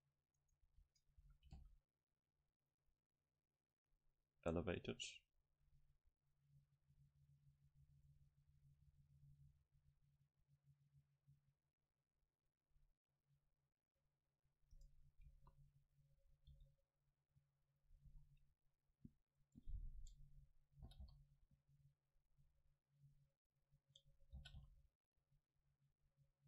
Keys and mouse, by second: 0.5 right click, 0.7 ctrl+t, 1.3 a, 1.6 c, 15.4 KP_0, 16.2 middle click, 16.6 e, 17.9-21.3 drag, 18.1 s, 20.9 g, 23.4-25.3 drag, 24.4 g.